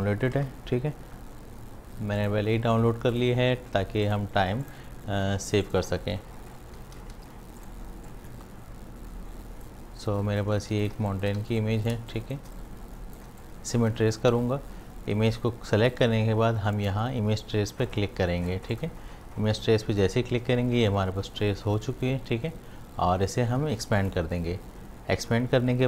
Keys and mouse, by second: 0.4 super+e, 2.2-10.7 drag, 10.7 space, 10.8 ctrl+alt+click, 11.4 v, 11.6 click, 12.0 space, 12.1 click, 13.3 space, 13.4 click, 13.8 space, 18.7 click, 24.0 click.